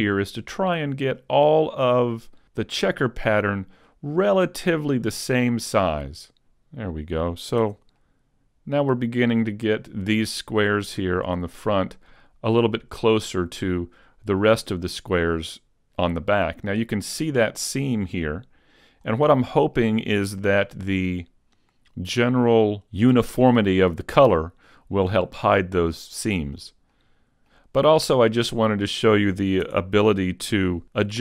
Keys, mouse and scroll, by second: 3.6 middle click, 6.2 click, 6.2 a, 7.7 Tab, 8.0 middle click, 13.2 middle click, 15.0 middle click, 16.5 middle click, 18.3 middle click, 25.5-26.2 scroll down 1, 26.2 shift+middle click, 27.0 middle click, 28.8 right click, 29.7 Tab, 30.5 a.